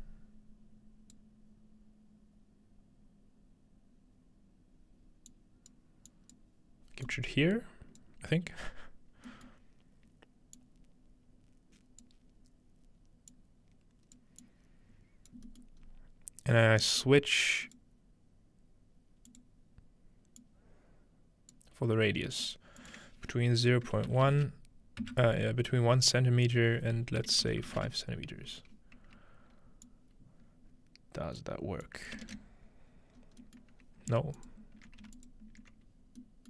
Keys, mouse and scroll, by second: 5.3-6.4 drag, 7.1 click, 10.6-12.1 drag, 13.3 click, 14.4 click, 15.8-16.8 scroll up 2, 16.8-17.5 scroll up 1, 17.7-24.7 drag, 17.8 middle click, 22.3-24.1 middle drag, 24.1 space, 25.0 Return, 26.4-28.4 drag, 27.4 ▪, 28.5 scroll down 1, 29.9-31.4 drag, 31.8 click, 32.3 ctrl+space, 32.9-33.2 scroll down 1, 33.2 scroll up 1, 33.4-35.3 middle drag, 33.9 scroll down 1, 34.4-36.4 alt+shift+drag.